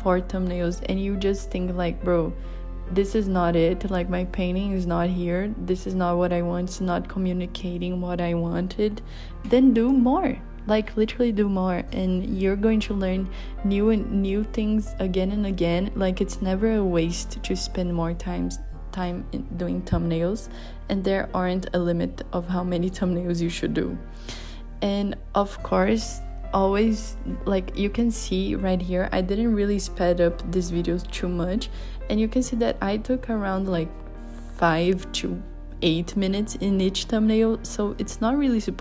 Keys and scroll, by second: 3.8 super+z, 9.0 b.